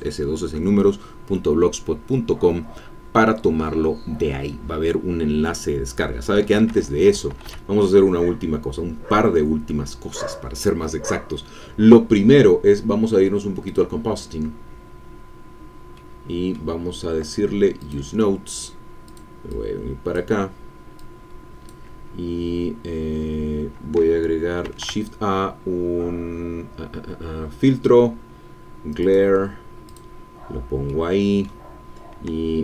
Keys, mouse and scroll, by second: 6.5 Escape, 16.0 middle click, 17.8 click, 19.0-21.8 drag, 24.6 shift+a, 29.0 click, 29.8 click, 30.9 middle click.